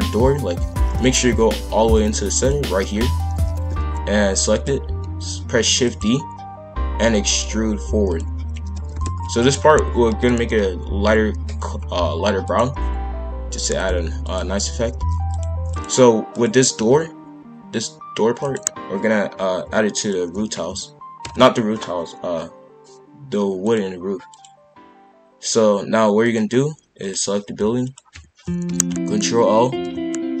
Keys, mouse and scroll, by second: 0.7 shift+f, 2.3 click, 3.4 shift+f, 5.6 shift+d, 6.7 e, 8.6 shift+f, 10.0 ctrl+l, 10.4 p, 13.7 click, 14.6 shift+f, 15.7 click, 16.3 click, 16.7 g, 20.0 shift+click, 21.2 ctrl+j, 23.6-27.1 drag, 27.8 shift+click, 28.6 ctrl+l, 29.7 p.